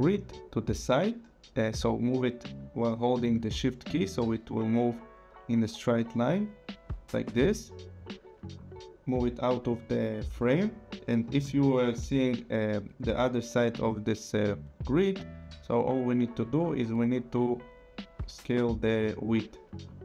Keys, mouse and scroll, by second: 4.1 shift+click, 16.6 click, 18.1 click.